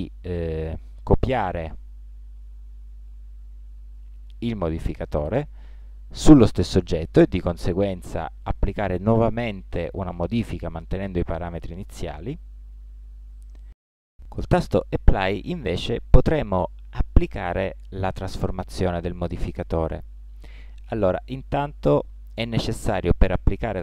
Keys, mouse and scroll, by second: 0.6 Tab, 1.6-3.5 drag, 22.0 Tab.